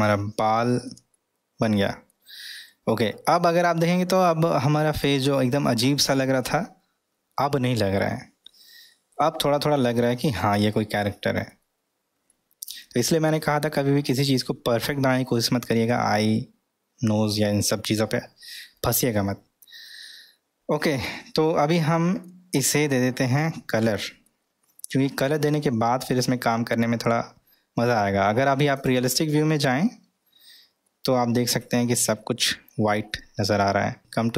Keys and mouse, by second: 0.5-0.8 middle drag, 1.1-2.1 middle drag, 2.9-3.5 middle drag, 4.4-5.2 middle drag, 5.8-11.5 middle drag, 12.3-14.2 middle drag, 15.3-15.9 middle drag, 19.2-20.9 middle drag, 21.7-22.3 middle drag, 23.0 middle click, 23.7 middle click, 25.3-26.1 middle drag, 29.7 click, 30.8-32.7 middle drag.